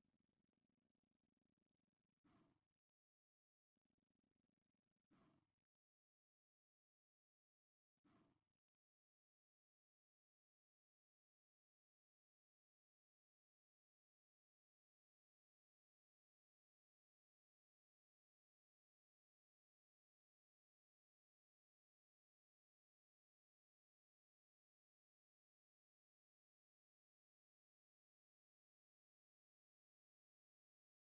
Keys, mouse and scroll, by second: 0.1-1.1 middle drag, 2.0 middle click, 3.2 click, 4.5 middle click, 6.0 ctrl+r, 7.2 right click, 7.8-10.4 middle drag, 11.4 middle click, 14.5 middle click, 15.1 shift+middle click, 15.7 middle click, 16.7 a, 16.9 c, 17.4 right click, 18.1 middle click, 19.6 shift+middle click, 20.8-22.2 drag, 22.5 middle click, 23.8 shift+v.